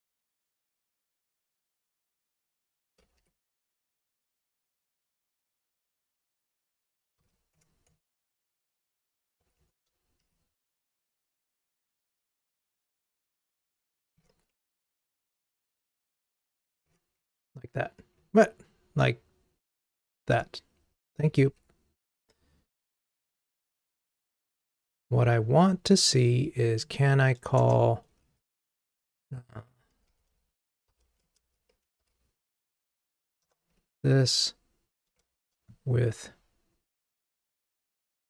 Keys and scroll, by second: 33.5 Return.